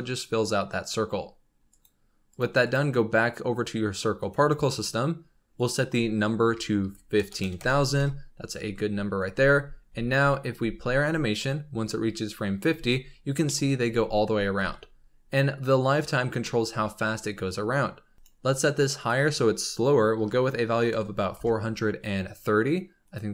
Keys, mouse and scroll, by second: 1.6 click, 2.2 click, 2.5 click, 4.1 click, 5.5-7.3 drag, 7.3 KP_0, 9.3 space, 9.8 space, 10.5 space, 12.4-13.3 scroll down 11, 12.6 space, 13.3 shift+middle click, 13.5 scroll up 4, 13.8 space, 14.4 space, 16.3-18.1 shift+middle drag, 18.1 click, 18.9-22.0 drag, 23.0-23.3 drag.